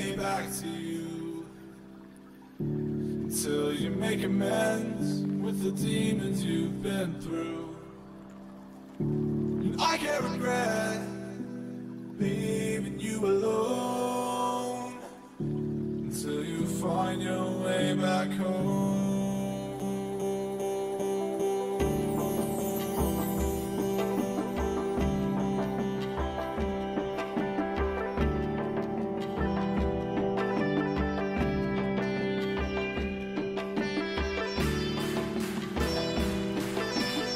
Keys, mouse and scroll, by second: 2.0-3.8 drag, 6.6 a, 7.3-11.6 middle drag, 11.6 z, 12.0 z, 12.4 a, 12.8 a, 13.5 Tab, 14.7-16.3 middle drag, 16.3 t, 17.5-19.6 drag, 19.9-22.2 drag, 21.7-23.4 middle drag, 27.8 middle click, 28.1 Tab, 28.6-30.9 middle drag.